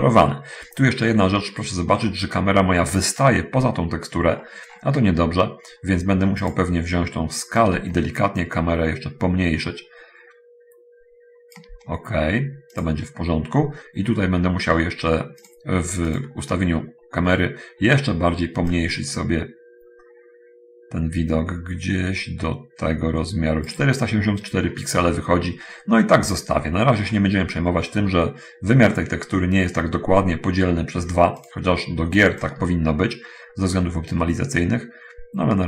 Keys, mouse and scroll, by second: 0.4-1.2 scroll up 1, 1.2 scroll down 1, 1.4-2.3 scroll up 1, 2.3-4.4 scroll down 1, 4.4-4.8 scroll up 1, 4.8 scroll down 1, 5.0-5.3 scroll up 1, 6.8 click, 7.8-11.9 shift+drag, 13.1 click, 14.3 middle click, 15.8 click, 19.0-24.0 drag, 25.4 middle click, 26.4-26.8 scroll up 1, 31.4 click, 32.8-35.6 shift+drag.